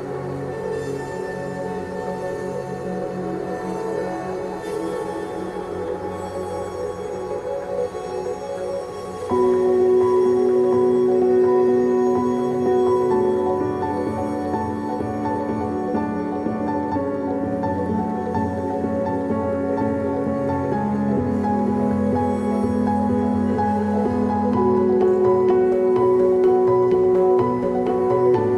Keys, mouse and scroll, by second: 4.3 KP_0, 5.4 g, 8.8 KP_0, 10.6 g, 13.8 s, 18.4 g, 21.5 s, 26.4 g.